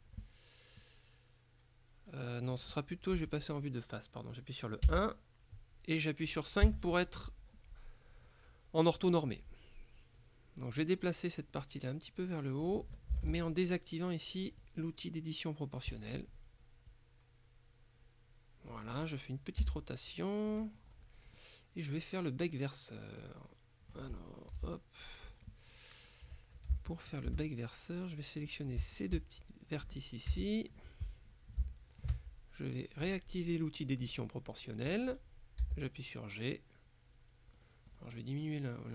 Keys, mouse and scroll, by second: 0.9-3.1 middle drag, 4.9 KP_1, 6.7 KP_5, 11.7-13.2 drag, 13.3 ctrl+z, 14.6 click, 16.0 click, 17.0-19.3 drag, 19.7 r, 20.6 click, 20.9-21.4 scroll up 1, 21.4 middle click, 24.6 KP_7, 26.1-26.7 scroll up 1, 26.9-27.9 shift+middle drag, 28.5 right click, 30.4 KP_1, 31.4-31.7 scroll down 3, 31.7 shift+middle click, 32.1-32.6 shift+scroll up 2, 33.1 click, 34.1 click, 35.7 g, 37.1-37.6 scroll down 2, 37.6-38.3 scroll up 2, 38.3-38.7 scroll up 1, 38.7-38.9 scroll down 2.